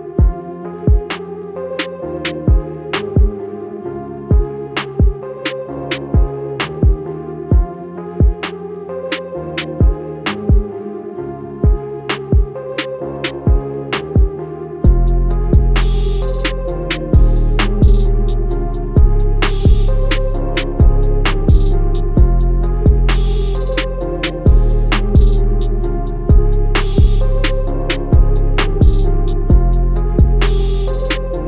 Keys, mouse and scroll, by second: 0.3 scroll up 1, 0.9 click, 2.4 click, 4.1 scroll down 1, 4.4 click, 6.0 click, 6.7 click, 7.4 scroll down 2, 7.5 click, 7.8 click, 9.4 alt+scroll up 1, 9.5 alt+scroll down 1, 9.8 click, 12.2 ctrl+z, 12.3 click, 13.4 ctrl+z, 13.6 click, 14.5 click, 17.0 click, 17.2 scroll up 1, 17.3 click, 17.9 Escape, 18.0 click, 19.2 alt+click, 19.4 alt+scroll down 1, 20.0 click, 20.4-21.4 scroll up 1, 21.6 click, 27.7-29.2 scroll down 1, 29.2 click, 30.7 scroll down 1.